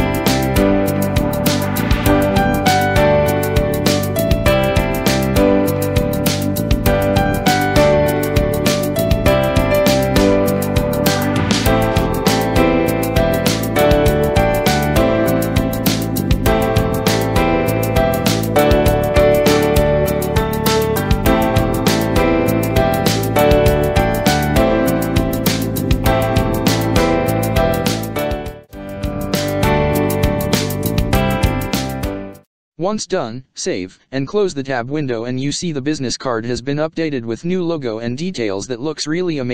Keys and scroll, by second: 0.4 space, 2.6 ctrl+space, 10.9 ctrl+c, 11.8 space, 27.6 Right, 29.0 Up, 29.5 Down, 32.3 ctrl+s, 37.2 space.